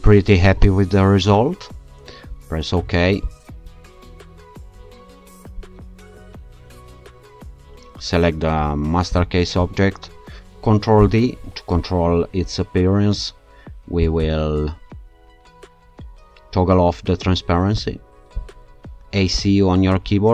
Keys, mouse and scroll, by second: 3.2 alt+shift+click, 5.6-6.4 scroll down 2, 9.1 click, 11.0 ctrl+d, 14.0-18.1 drag, 18.4 click, 18.9 a, 19.3 c.